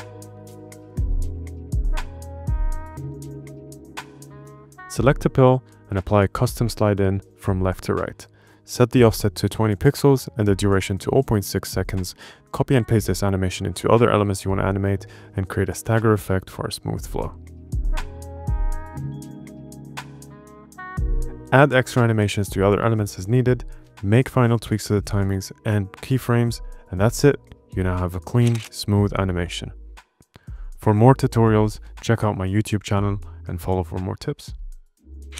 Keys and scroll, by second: 10.0-11.2 typing, 12.4 super+c, 13.2 super+v, 20.4 space.